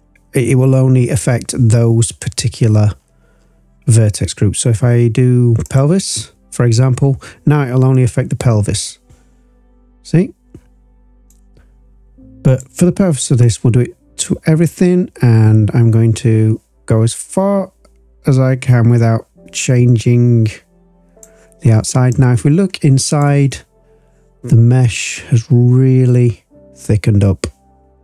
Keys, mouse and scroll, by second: 7.9-11.2 drag, 12.4 click, 13.4-21.2 drag, 22.1-23.2 drag, 23.5-24.2 scroll up 4, 25.0-26.0 drag, 27.9 click.